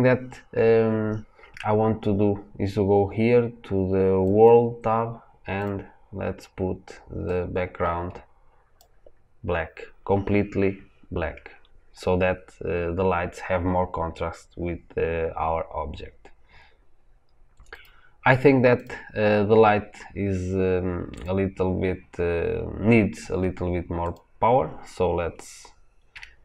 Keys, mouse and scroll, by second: 17.7 click.